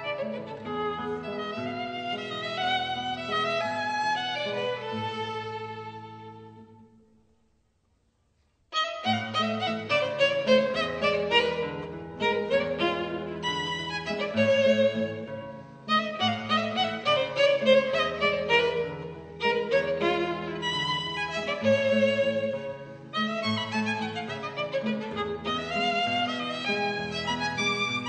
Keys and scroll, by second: 1.3 super+z, 2.5 super+z, 4.4 super+z, 4.9 super+z, 5.8 super+z, 17.8 super+z, 18.5 super+z, 19.3 super+z, 20.5 super+z, 21.8 super+z.